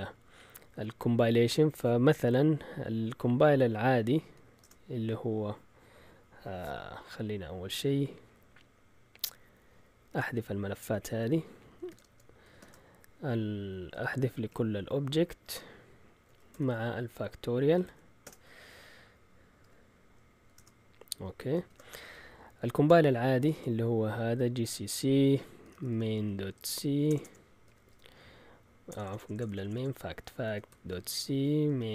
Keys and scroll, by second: 4.1-5.0 typing, 11.5-12.6 typing, 13.9-17.7 typing, 17.8 Tab, 18.2 Return, 19.6-23.5 typing, 25.4-31.9 typing.